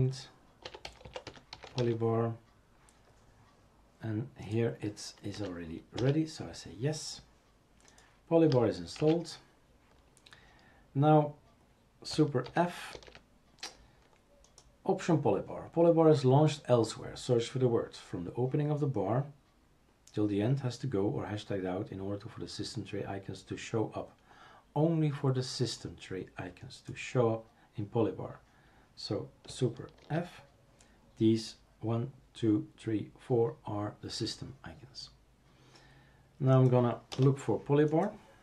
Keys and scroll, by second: 0.4-2.0 typing, 5.3 typing, 9.0 shift+super+q, 12.5 super+d, 13.0 super+f, 30.0 super+f, 37.1 BackSpace.